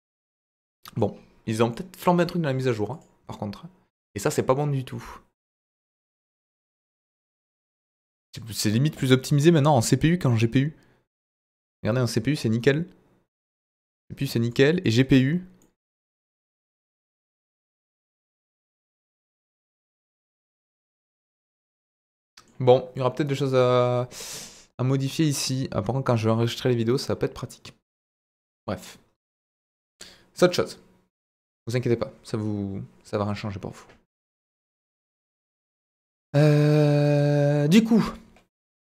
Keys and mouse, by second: 0.2-1.1 middle drag, 1.7-2.2 middle drag, 3.0-4.0 drag, 6.0 click, 6.6-13.9 middle drag, 14.4-15.1 drag, 15.6-19.3 middle drag, 19.8-20.7 drag, 22.0-22.5 middle drag.